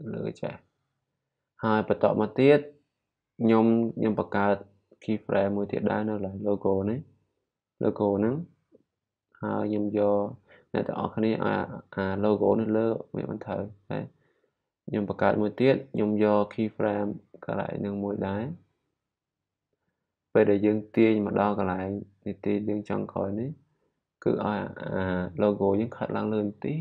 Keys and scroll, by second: 8.8 p.